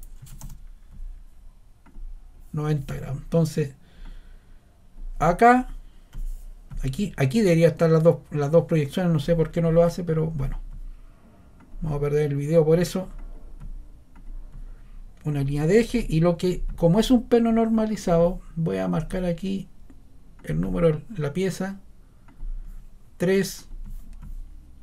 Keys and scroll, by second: 0.0-0.8 typing.